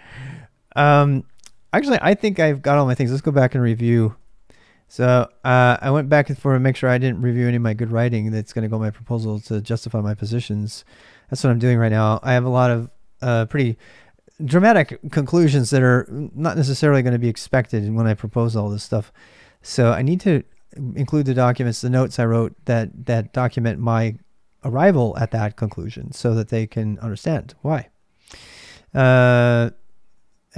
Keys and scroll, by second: 0.0-30.5 typing, 5.0 ctrl+a.